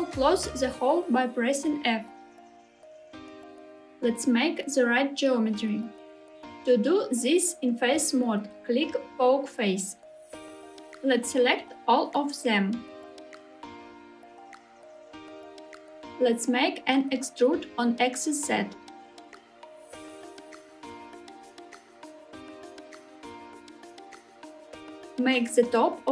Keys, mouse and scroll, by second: 0.5 click, 0.7 click, 1.6 f, 4.3 3, 5.8-9.8 right drag, 10.2 middle click, 12.8 a, 14.2 2, 15.3 middle click, 16.2 e, 23.0 click, 23.5-24.9 middle drag, 25.1 s.